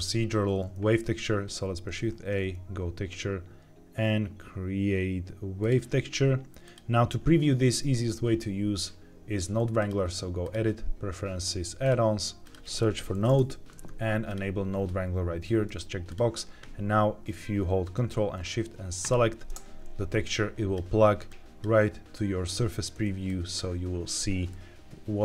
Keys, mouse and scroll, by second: 1.3 shift+a, 9.7-10.6 drag, 18.9 ctrl+shift+click, 20.1 click, 21.2 click, 23.2 click, 24.4-25.2 middle drag.